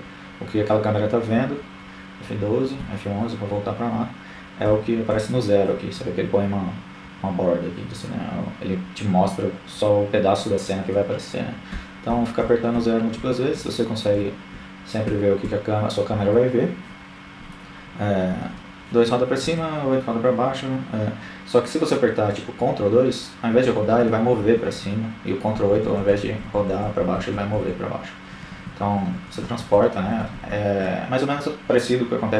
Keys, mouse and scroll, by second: 0.0 F11, 1.8 KP_0, 2.2 KP_0, 8.8-13.4 typing, 15.4 KP_2, 15.6 KP_2, 16.5 KP_8, 16.8 KP_8, 20.6 ctrl+KP_2, 20.9-22.0 ctrl+KP_2, 22.7-24.5 ctrl+KP_8, 24.9 ctrl+KP_8, 25.6-26.5 ctrl+KP_2, 26.8 ctrl+KP_2, 27.0 ctrl+KP_2, 27.2-27.7 ctrl+KP_8, 30.6-32.0 middle drag.